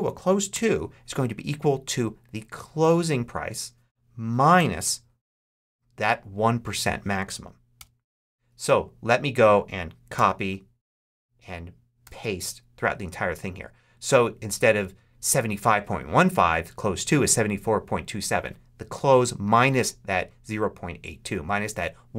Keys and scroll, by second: 0.4 =, 4.4 -, 7.7 Return, 10.0 super+c, 11.9 super+v.